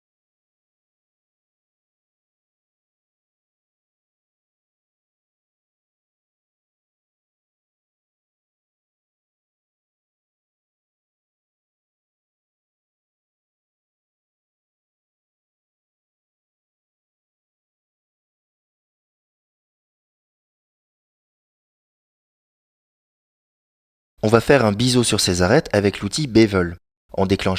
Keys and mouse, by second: 0.0-1.0 shift+right drag, 1.8 shift+right click, 2.7 shift+right click, 3.3 shift+right click, 4.0 shift+right click, 4.8 shift+right click, 5.5 shift+right click, 6.3 shift+right click, 7.0-8.4 middle drag, 8.4 shift+click, 8.5 shift+middle click, 9.5 shift+right click, 11.7 shift+right click, 12.3-13.3 middle drag, 14.5-15.9 shift+right drag, 16.8 shift+right click, 20.7-23.0 middle drag, 23.8-25.4 middle drag, 26.3 middle click.